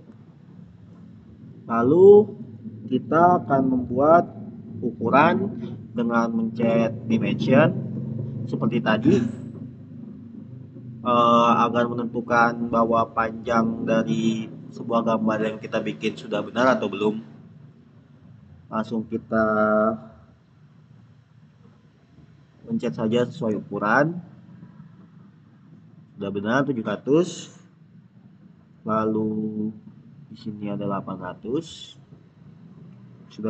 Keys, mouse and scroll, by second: 7.0 click, 11.5 click, 14.6 click, 17.4 click, 22.8 click, 25.0 click, 30.0 click, 32.0 click.